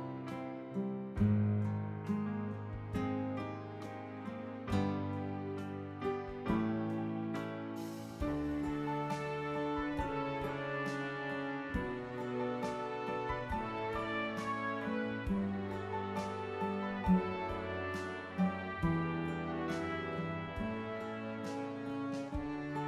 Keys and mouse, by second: 2.7 click, 3.7 click, 5.0 click, 8.5 click, 9.2 click, 13.1 click, 15.5 click, 16.5 click, 17.0 ctrl+d, 18.1 ctrl+d, 18.2 click, 19.8 click, 20.1 ctrl+a, 21.9-22.8 typing.